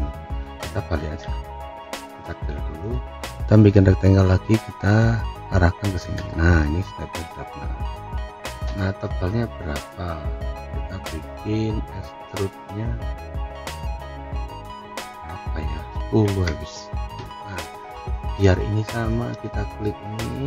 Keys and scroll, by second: 16.4 Return.